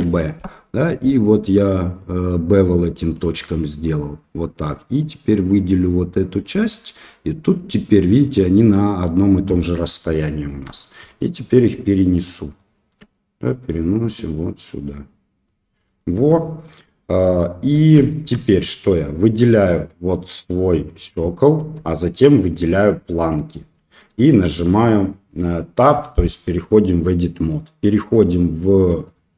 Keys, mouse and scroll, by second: 5.0-6.7 drag, 10.7 shift+middle click, 11.6 click, 12.7 shift+middle click, 13.8-15.4 drag, 16.1 Tab, 17.2 shift+right click, 18.0-18.3 shift+middle drag, 18.9 click, 22.4 shift+click, 24.4 Tab, 29.0 click.